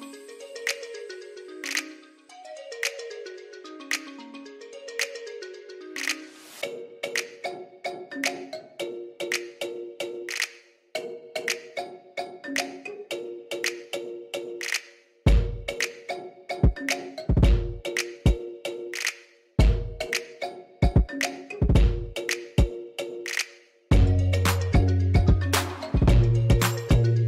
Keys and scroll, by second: 0.8 ctrl+z, 3.2 s, 4.5-6.2 typing, 6.0 Return, 7.7 shift+z, 8.3 s, 9.5 s, 10.3 ctrl+r, 10.6 Return, 10.8 s, 11.0 0, 11.1 Return, 12.3 ctrl+b, 15.7 s, 18.6 s, 20.3 s, 22.5 s, 24.5 s, 24.7 0, 24.9 Return, 25.8 s, 26.0 0, 26.3 Return.